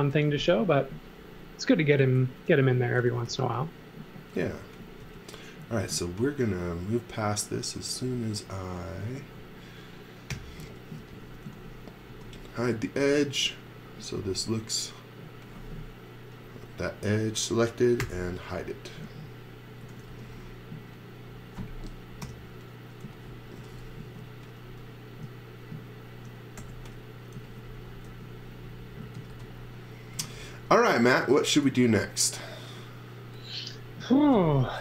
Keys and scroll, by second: 0.1 m, 2.7-3.7 typing, 5.0 space, 6.0 space, 10.3-12.5 typing, 13.6 space, 18.0 h, 19.8 x, 20.0 v, 22.2 p, 23.0 z, 23.5 x, 24.0 space, 26.5-31.6 typing.